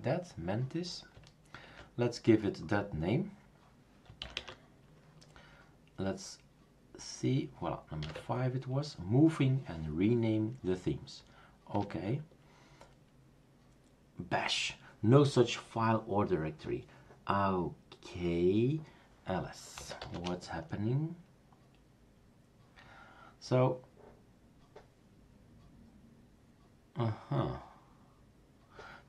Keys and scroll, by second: 0.0-0.1 typing, 0.1 super+d, 0.1 Return, 1.7 super+q, 4.2 typing, 8.0 5, 8.2 Tab, 11.7 Return, 19.5-20.5 typing.